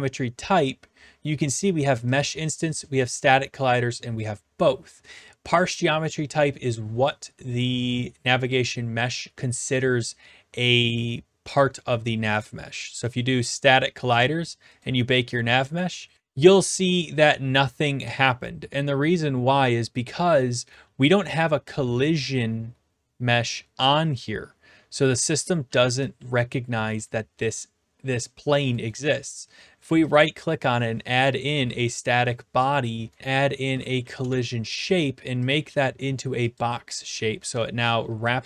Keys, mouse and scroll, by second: 2.2-3.2 drag, 13.2-14.3 drag, 14.8-15.9 drag, 20.8-21.3 typing, 21.4-22.5 right drag, 25.0-26.5 typing, 26.3-27.5 right drag, 27.5-28.6 drag, 28.9-30.0 right drag, 30.4 click, 31.6 Return, 33.2 click, 34.0 Down, 34.2 Return, 35.5-36.7 drag, 37.6-38.4 typing.